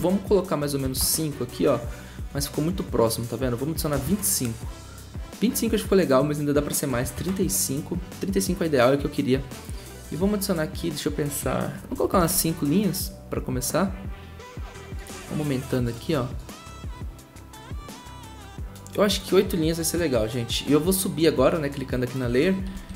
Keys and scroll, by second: 0.6-1.3 typing, 3.5-4.2 typing, 6.6-7.4 typing, 11.6-12.4 typing, 19.8 8, 19.9 Return, 22.7 shift+Up.